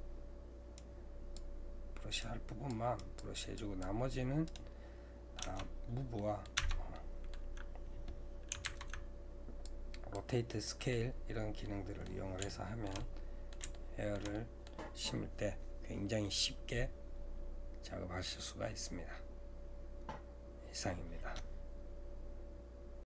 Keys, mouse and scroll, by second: 4.6-6.2 right drag, 6.2 middle click, 6.6 Tab, 6.9-8.6 middle drag, 8.6 ctrl+Tab, 10.6 middle click, 11.1-11.6 scroll down 2, 11.6-17.4 middle drag.